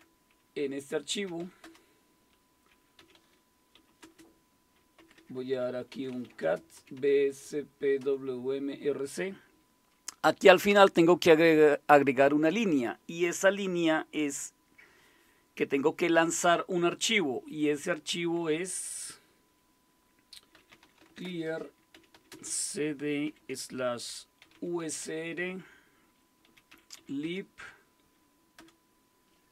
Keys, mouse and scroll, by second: 0.0-8.0 typing, 20.3-25.0 typing, 26.2-27.5 typing, 28.6 typing.